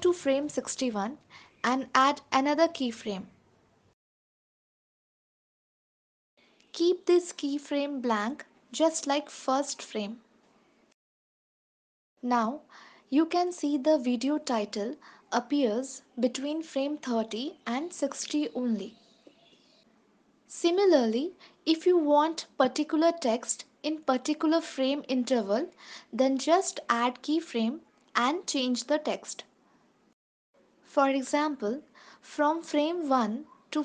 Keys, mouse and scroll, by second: 0.9 click, 1.9 ctrl+s, 3.0 click, 5.1 click, 6.4 click, 10.1 ctrl+s, 11.1 click, 11.7 ctrl+s, 13.1 space, 18.6 space, 19.6 ctrl+s, 20.8 space, 21.8 ctrl+s, 26.5 scroll up 1, 27.7 click, 30.1 ctrl+s, 30.2 click, 31.1 ctrl+s.